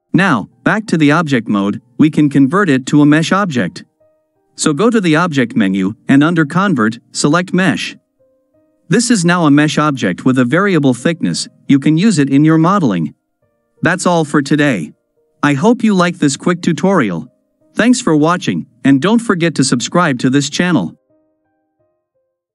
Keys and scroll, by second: 8.9 KP_Decimal.